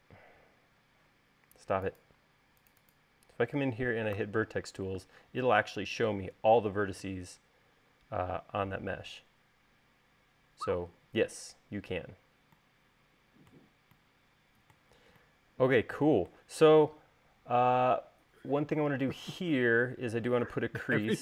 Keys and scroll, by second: 1.3 Escape, 5.1 v.